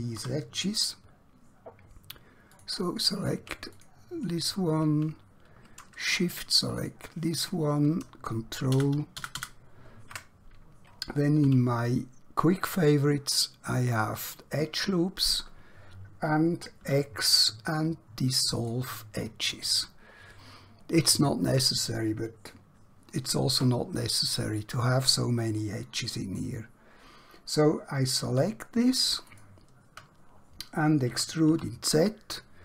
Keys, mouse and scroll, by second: 0.4 2, 2.5 alt+click, 3.8 click, 6.9 shift+click, 8.7 ctrl+shift+KP_Add, 11.5 q, 14.0 click, 16.9 x, 18.5 click, 19.6 scroll down 1, 20.0 scroll up 1, 20.7-22.7 scroll down 1, 28.0 alt+Num_Lock, 28.2 alt+2, 29.3 alt+click, 31.1 e, 31.5 z.